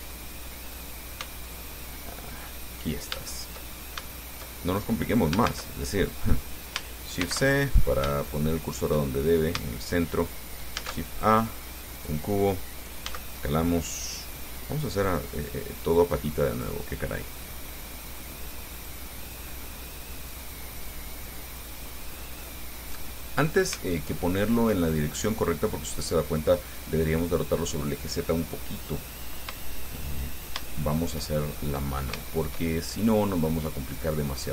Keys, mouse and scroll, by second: 1.0 right click, 1.4 x, 1.7 click, 2.6 click, 3.4 shift+click, 4.0 shift+scroll up 1, 4.3 shift+click, 4.3-5.4 shift+middle drag, 5.7 shift+a, 7.4 shift+c, 8.0-8.3 shift+scroll up 4, 8.4 shift+click, 9.4 shift+scroll down 2, 11.0 shift+a, 12.2 click, 13.3 s, 15.3 click, 15.8-17.1 drag, 17.6-20.1 drag, 20.5-22.0 drag, 22.6 middle click, 24.4 shift+click, 25.5 click, 29.8-30.9 shift+drag, 31.0 shift+click, 31.0 shift+middle click, 31.7-32.1 shift+scroll up 2, 32.4 shift+middle click, 34.1-34.5 drag.